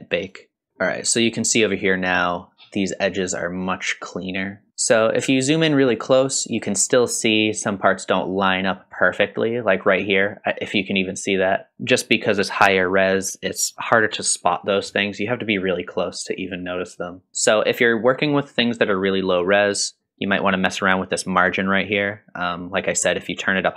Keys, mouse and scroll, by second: 0.2 click, 1.3-2.6 scroll up 9, 3.6-4.7 scroll up 2, 4.7 shift+middle click, 4.7 scroll down 1, 11.7 shift+middle click, 11.7-13.5 scroll down 4, 16.2-16.5 scroll down 2, 16.6-17.3 middle drag, 17.3 scroll down 1.